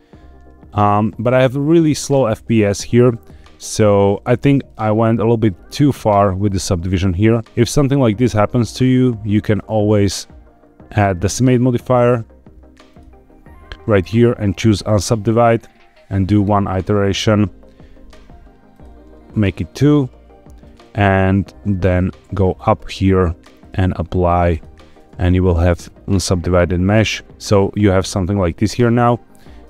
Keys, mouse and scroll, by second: 2.1 space, 2.4 click, 2.7 Tab, 4.6 shift+middle click, 5.4 scroll up 3, 6.4 shift+middle click, 7.7-8.2 drag, 9.4-12.9 drag, 14.7 click, 16.3 click, 18.6 click, 21.8-22.2 drag, 23.5-24.5 drag, 24.9 Tab, 26.4 click, 27.2 Tab, 27.2 click, 28.5 Tab, 29.2 scroll down 3.